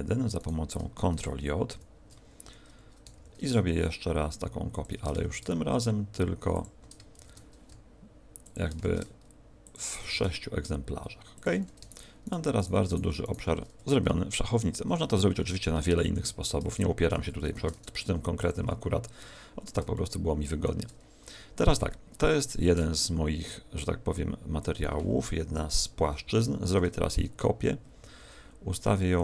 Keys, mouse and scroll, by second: 0.3 shift+right click, 1.6 ctrl+j, 3.1 shift+d, 4.8 ctrl+click, 5.2 shift+d, 6.6 ctrl+click, 7.1 shift+d, 8.4 ctrl+click, 8.8 shift+d, 9.6 ctrl+click, 10.0 shift+d, 11.4 ctrl+click, 11.8 shift+right click, 12.2 shift+right click, 12.8 shift+right click, 13.2 shift+right click, 17.4 ctrl+alt+shift+c, 19.3-19.9 scroll down 4, 19.9 shift+middle click, 22.6 click, 25.4 KP_1, 26.6 shift+d, 29.1 click.